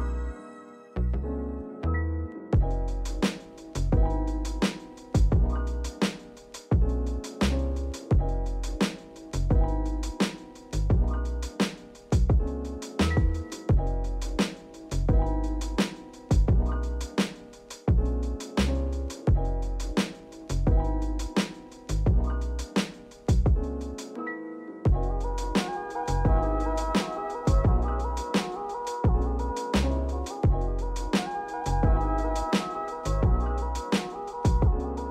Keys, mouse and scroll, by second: 0.9 click, 2.8 click, 5.5 click, 6.6 click, 8.2 click, 9.2-9.9 drag, 12.1-15.2 drag, 16.4-21.2 drag, 22.3-24.8 drag, 25.8-28.8 drag, 29.3-30.2 shift+middle drag, 30.2-30.5 scroll up 1, 30.5-30.9 shift+middle drag, 30.9 scroll up 1, 31.3 shift+middle drag, 31.6 scroll up 1, 31.9 click, 32.4-32.9 drag, 33.9-34.9 drag.